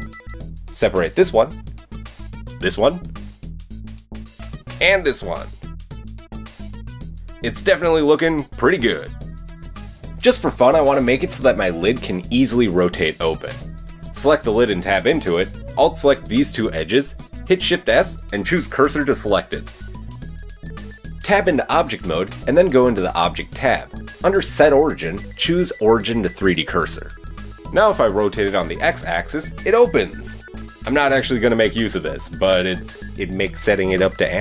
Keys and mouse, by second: 0.1 middle click, 0.1 right click, 0.5 middle click, 0.5 right click, 1.3 y, 1.7 Escape, 2.3 middle click, 2.3 right click, 3.9 y, 4.3 Escape, 4.5 Tab, 5.3 y, 5.9 Escape, 6.2-7.0 drag, 7.0 middle click, 8.1-9.7 middle drag, 9.7 click, 10.1 middle click, 10.4 click, 10.6 shift+middle click, 10.7 shift+click, 14.6 Tab, 16.8-21.0 shift+drag, 17.3 shift+s, 21.6 Tab, 27.2 middle click, 27.2-29.8 drag, 27.9 r, 29.8 middle drag, 31.7 middle click, 32.0-34.4 middle drag.